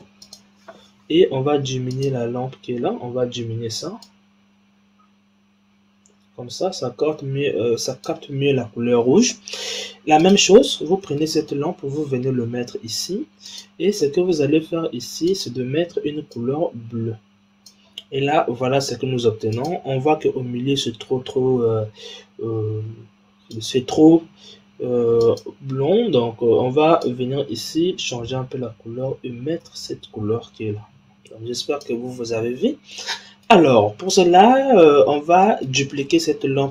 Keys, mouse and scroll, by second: 1.8 click, 3.9-6.9 drag, 10.1 click, 11.5 shift+d, 15.2 click, 19.4 click, 23.4 click, 25.1 click, 32.9-33.8 middle drag, 33.8-35.4 scroll down 4, 35.4 middle click, 35.8-36.7 scroll down 3.